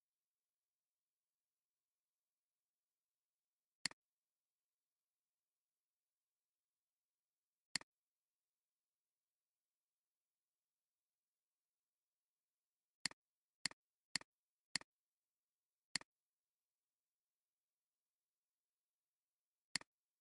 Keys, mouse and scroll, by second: 0.0-2.3 typing, 7.0 alt+scroll up 1, 7.5 space, 8.0 space, 15.5-17.1 drag, 19.2 alt+scroll down 1, 19.5 space.